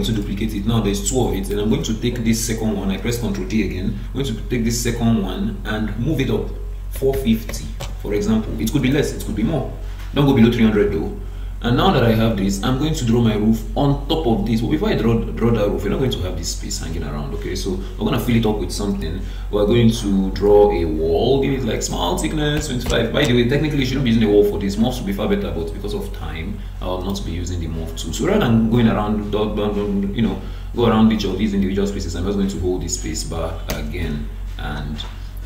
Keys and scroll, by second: 1.7 ctrl+d, 7.8 Return, 23.2 Return, 28.2 Escape.